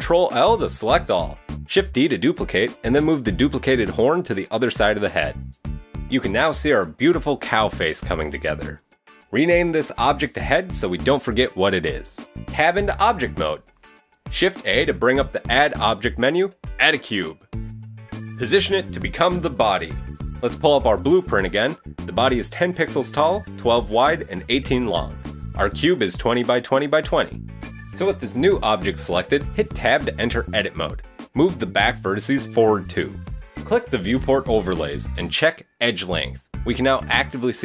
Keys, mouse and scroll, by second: 1.0 shift+d, 2.3 shift+middle click, 2.5 middle click, 5.3 middle click, 9.0 click, 9.1 click, 12.1 Tab, 12.3 right click, 12.5-13.1 scroll down 3, 12.6 middle click, 13.1 KP_3, 13.6 shift+middle click, 14.0 shift+a, 18.0 shift+middle click, 18.2 g, 28.4 shift+middle click, 28.8 Tab, 29.5 a, 29.7 a, 31.3 c, 31.9 g, 32.6 middle click, 32.8 Tab, 33.0 Tab, 33.7 click, 33.9 Tab, 34.4 a, 35.4 click.